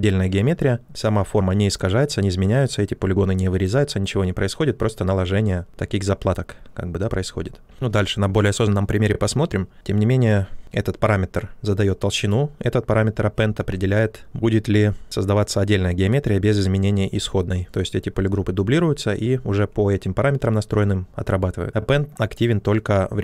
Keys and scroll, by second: 13.5 ctrl+z, 14.2 q.